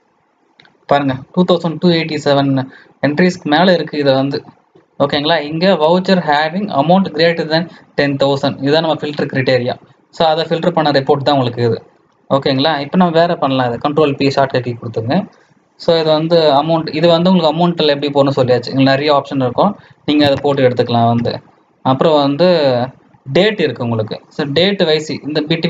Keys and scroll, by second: 13.9 ctrl+p.